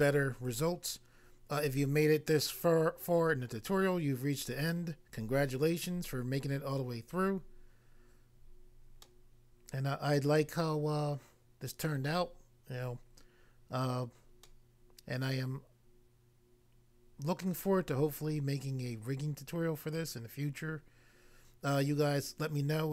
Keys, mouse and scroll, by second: 9.0 middle click, 11.9 middle click, 14.4 middle click, 17.4 middle click.